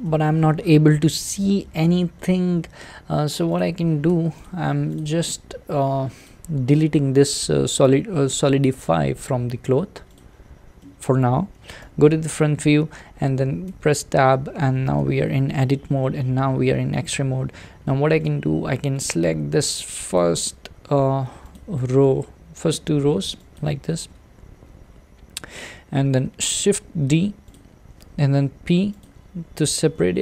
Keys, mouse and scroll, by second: 0.0-3.6 middle drag, 3.6 click, 4.1 Tab, 4.4 click, 4.9 click, 10.2-10.8 drag, 10.8-11.8 middle drag, 11.8 `, 13.7 Tab, 15.0 alt+z, 15.8-16.3 shift+middle drag, 16.3-17.9 scroll up 3, 17.9-20.1 shift+middle drag, 20.1 click, 21.5 click, 22.5 click, 23.5 shift+click, 24.6 scroll down 2, 25.5-26.6 scroll up 2, 26.6 shift+d, 29.0 p, 30.0 Tab.